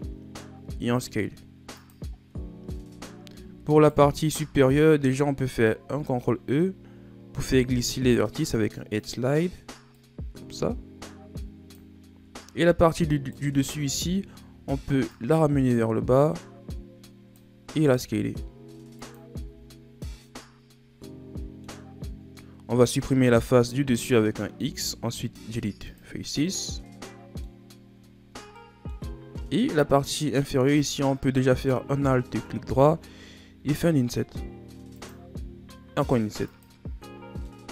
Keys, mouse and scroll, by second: 2.5-3.6 shift+scroll up 4, 3.6 alt+right click, 5.8 ctrl+e, 13.1 alt+right click, 14.0-15.1 shift+scroll up 4, 15.1-17.8 drag, 17.8 s, 19.3 z, 19.6 scroll down 4, 19.9-21.9 middle drag, 21.9-24.5 scroll up 3, 24.5 x, 26.5 scroll up 1, 26.6-27.6 middle drag, 27.6-28.5 scroll down 5, 28.5 middle click, 29.1 shift+scroll down 2, 29.4-29.9 scroll up 1, 29.9-31.4 middle drag, 31.4 alt+right click, 33.5 i, 35.3 i, 36.8 Tab, 37.1 scroll down 2, 37.3-37.7 middle drag.